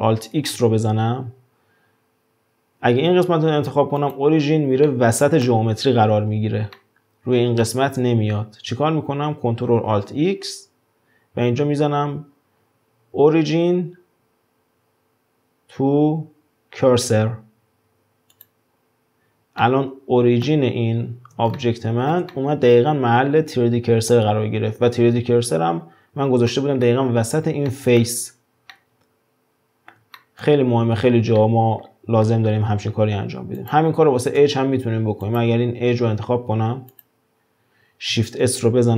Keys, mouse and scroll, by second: 0.4 ctrl+alt+x, 4.9-9.8 middle drag, 10.0 ctrl+alt+x, 19.6-21.0 middle drag, 21.0-21.6 scroll up 2, 21.6-24.3 shift+middle drag, 24.3-26.1 scroll down 2, 26.1-26.5 scroll down 2, 26.5-30.6 middle drag, 30.6-31.4 scroll up 2, 31.4-32.5 shift+middle drag, 32.5-32.9 scroll down 4, 32.9-33.6 scroll up 5, 33.6 click, 34.4 Tab, 35.2 click, 36.5 2, 36.9 click, 38.4 shift+s.